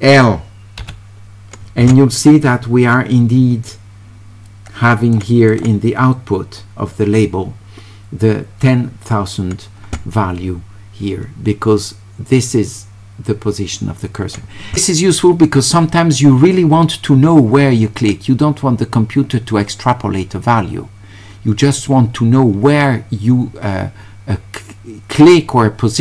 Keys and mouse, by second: 3.7-5.2 drag, 5.5 click.